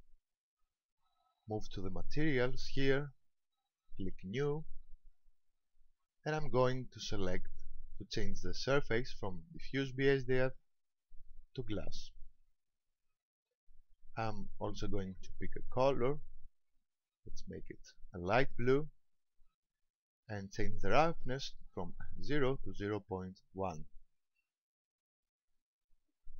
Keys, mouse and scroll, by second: 2.9 click, 5.1 click, 9.7 click, 15.0 click, 23.2 click.